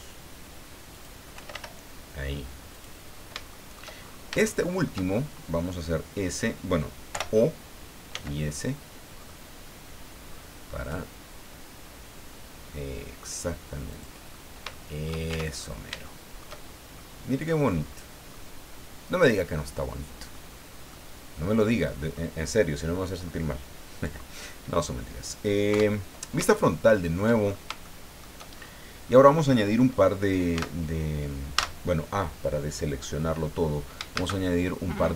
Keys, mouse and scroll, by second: 0.9 click, 1.1-2.0 typing, 2.7 click, 3.1 scroll down 1, 3.5 shift+middle click, 4.0-4.3 shift+scroll up 1, 4.4 shift+middle click, 5.1 shift+scroll up 1, 7.1 o, 8.1 s, 9.1-9.6 scroll up 2, 10.3-10.8 scroll up 2, 13.9 click, 14.3 scroll down 2, 14.7 shift+middle click, 15.3 shift+Tab, 15.5-15.8 shift+scroll down 2, 16.0 shift+click, 16.9 shift+click, 17.7-18.1 scroll up 2, 18.3 scroll down 2, 20.3-20.6 scroll down 2, 20.9 middle click, 21.8 middle click, 24.9 scroll down 2, 25.7 KP_1, 26.2 scroll down 3, 26.5 shift+middle click, 27.4-27.7 shift+scroll up 1, 27.8 shift+middle click, 28.5-28.8 shift+scroll up 1, 29.0 scroll down 1, 30.5 Tab, 31.5 a, 34.1 shift+a.